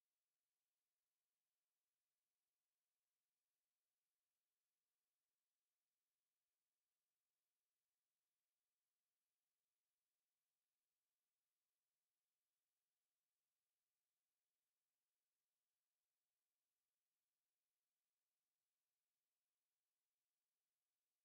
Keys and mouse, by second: 1.2 click, 2.0 KP_Divide, 6.0 KP_7, 9.2 Tab, 12.1 Tab, 13.0 Tab, 17.9 drag, 18.6 Tab, 20.2 b.